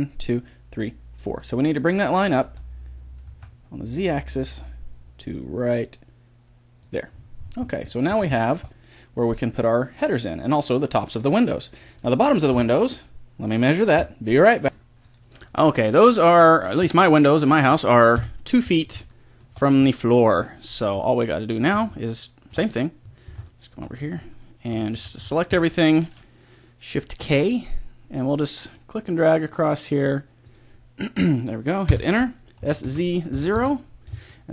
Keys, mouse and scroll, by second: 2.4 g, 7.1-10.2 middle drag, 12.4 KP_3, 18.2 KP_1, 24.9 a, 25.2 a, 27.2 shift+k, 32.6 s, 34.4-34.5 middle drag.